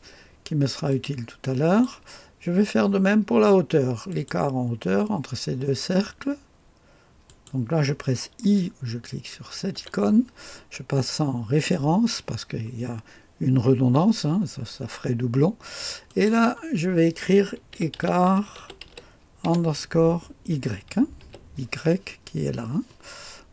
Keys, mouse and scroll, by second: 0.9-2.3 drag, 4.1 click, 7.2 click, 9.7 typing, 11.5 click, 16.0 click, 17.5-19.5 typing, 21.2 typing.